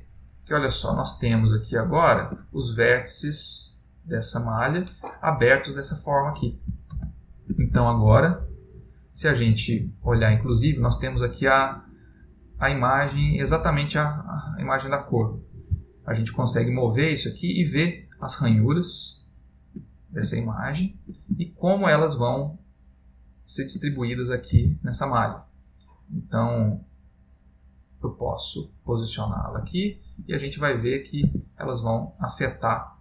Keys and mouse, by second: 0.6 ctrl+middle click, 1.9 ctrl+middle click, 5.9 middle click, 29.8 ctrl+space, 30.7 middle click, 31.6 Tab, 32.1 middle click.